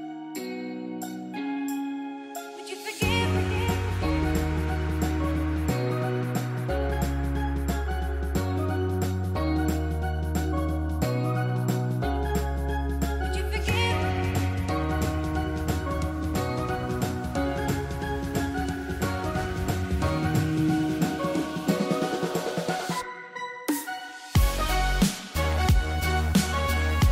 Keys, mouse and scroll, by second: 0.0-2.8 typing, 0.2 click, 2.0 click, 3.0 click, 6.5 click, 7.6 z, 8.1 click, 13.1 space, 13.3 click, 13.6 space, 13.9 click, 15.2 ctrl+e, 15.7 click, 19.6 z, 20.1 click, 20.7 space, 20.9 click, 23.4 click.